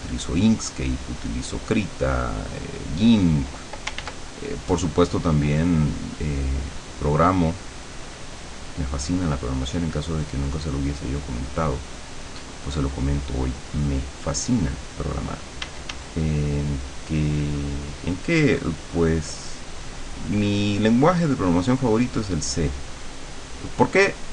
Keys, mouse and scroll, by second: 4.1 ctrl+z, 5.2-14.8 drag, 15.7 d, 16.3-19.9 drag, 20.3-23.9 drag, 24.1 click.